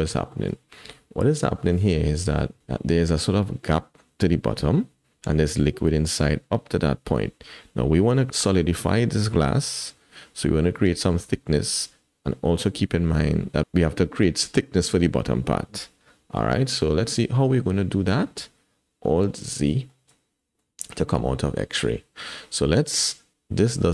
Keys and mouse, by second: 0.3 shift+click, 17.6-18.4 drag, 19.4 alt+z, 19.9 shift+drag, 20.4 click, 21.0 shift+click, 21.8 click, 23.8-23.9 drag.